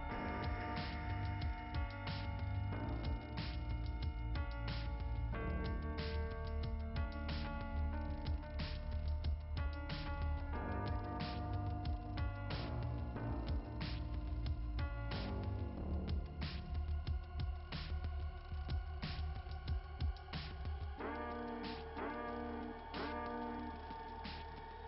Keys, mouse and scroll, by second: 2.0 click, 3.0 click, 4.0 click, 11.6 click, 13.2 scroll down 1, 14.0-14.6 scroll down 2, 16.3 click, 16.5 click, 17.6 click, 17.8 click, 21.6 click, 23.8 click.